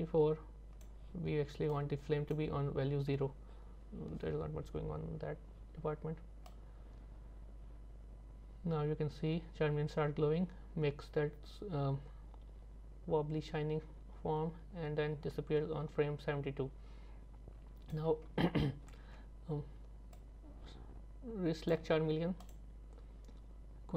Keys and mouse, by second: 1.7 click, 6.5-18.0 drag, 20.2-21.7 drag, 22.5 click.